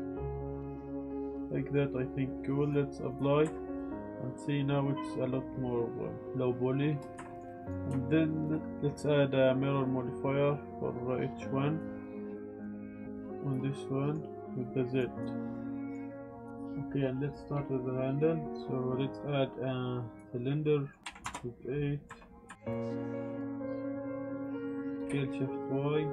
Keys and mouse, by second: 1.4 drag, 2.6-3.1 drag, 3.4 Tab, 3.7-6.2 drag, 7.2 drag, 7.4 ctrl+s, 9.4 click, 9.6-11.8 drag, 12.5 click, 13.8 middle drag, 14.9 click, 15.1 click, 15.5-15.9 middle drag, 18.5 shift+a, 20.6-21.0 drag, 21.0 click, 22.0 Tab, 22.5-25.1 typing, 23.4 KP_Enter, 24.0 middle click, 24.8 click.